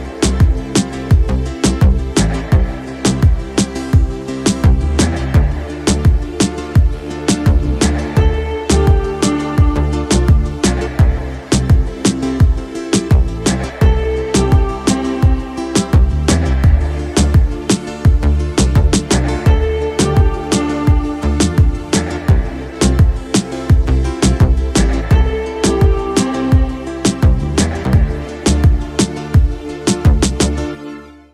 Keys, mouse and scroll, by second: 2.7 middle click, 4.0-5.2 middle drag, 5.8-12.5 middle drag, 12.9-16.5 middle drag, 16.5 right click, 17.4 middle click, 18.1 right click, 18.7 click, 18.8-24.7 middle drag, 25.3 shift+click, 25.6 middle click, 27.0 KP_5, 28.3 click, 29.2 click, 29.6 middle click.